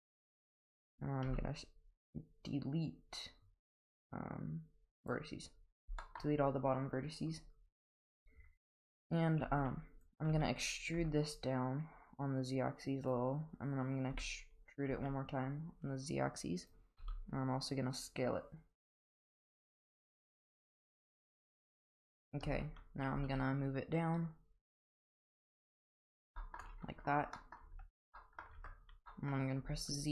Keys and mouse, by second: 1.2 x, 6.0 shift+middle click, 7.7 click, 9.4 g, 10.3 e, 14.1 e, 17.0 s, 22.4 Tab, 23.1 g, 26.4 shift+middle click, 27.4 middle drag, 27.7 Tab, 28.2 middle click, 28.6 Tab, 29.1 middle drag, 29.6 z.